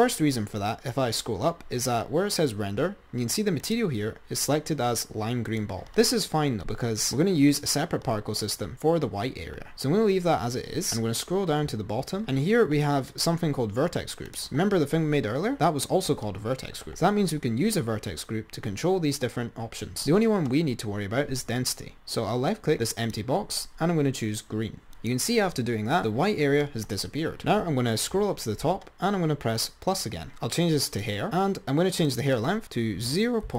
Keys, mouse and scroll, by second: 1.4-3.5 scroll up 4, 3.9-5.9 drag, 10.1-12.4 scroll down 19, 12.4-13.3 scroll down 24, 13.3-16.8 drag, 16.8-19.5 scroll down 4, 23.2-25.1 drag, 27.5-30.0 scroll up 27, 30.0 click, 31.4 click, 32.2-33.5 drag.